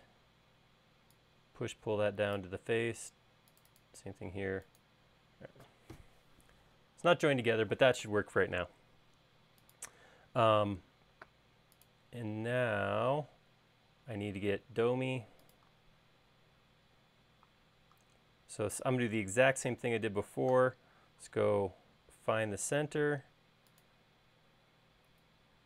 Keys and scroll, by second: 0.2 p, 4.8 space, 20.2 |.